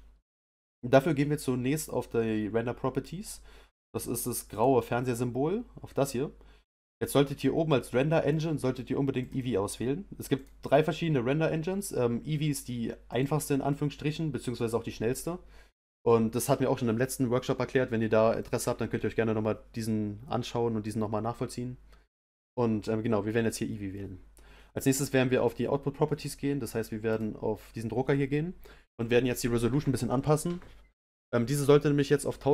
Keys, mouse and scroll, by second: 9.2-13.5 drag.